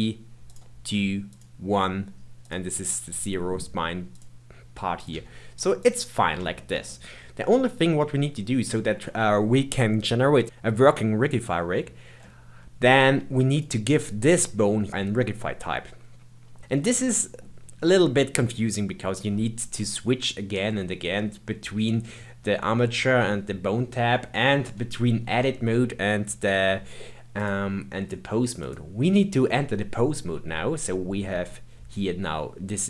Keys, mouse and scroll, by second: 0.5 click, 1.3 click, 2.4 click, 4.1 click, 4.9 click, 5.1 g, 6.1-6.5 scroll down 1, 6.5-10.4 shift+middle drag, 12.2-13.4 middle drag, 13.4 click, 14.9-16.0 middle drag, 16.7-19.8 middle drag, 27.3-30.3 drag.